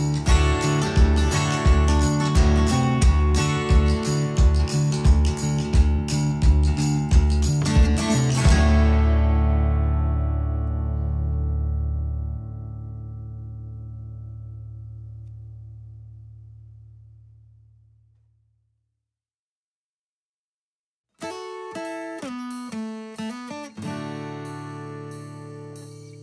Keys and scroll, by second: 20.2-23.2 typing.